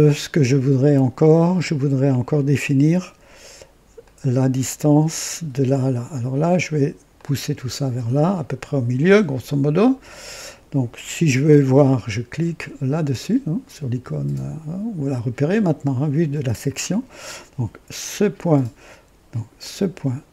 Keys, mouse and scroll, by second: 3.9 click, 7.1-9.4 drag, 12.8 click, 17.9 click, 19.5 click.